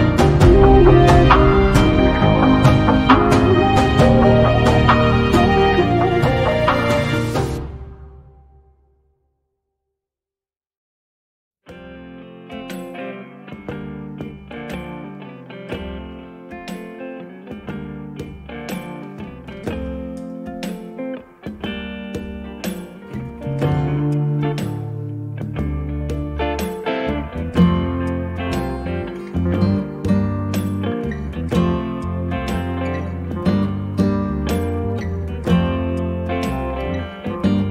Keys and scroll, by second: 0.1 Delete, 2.0 m, 7.2 space, 10.8 b, 23.6 space, 30.9 b.